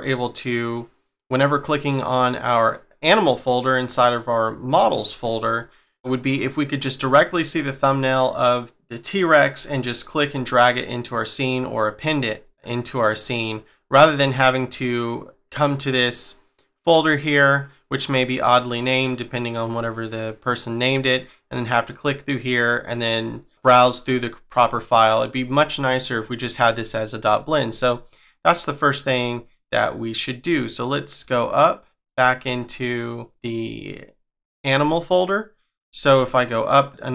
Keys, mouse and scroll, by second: 0.0 scroll down 2, 0.5-2.8 scroll up 3, 5.4 scroll down 2, 5.9 scroll up 4, 6.2 scroll down 2, 7.2 scroll up 2, 9.5-10.8 scroll down 2, 10.8-12.5 scroll up 1, 13.1-13.5 scroll down 1, 13.5-14.2 scroll up 1, 14.2 click, 14.6 click, 20.8 click, 21.9 click, 23.0-23.6 scroll down 5, 23.6-25.9 scroll up 5, 31.2 click, 32.0 click, 32.6 scroll down 1, 36.4 click.